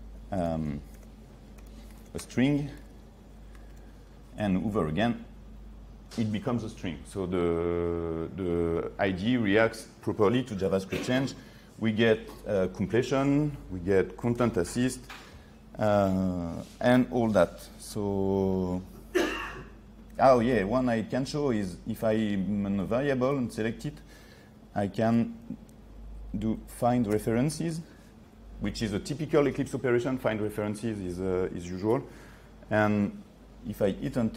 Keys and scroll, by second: 3.8 ctrl+s, 14.4 ctrl+space, 25.1 ctrl+3.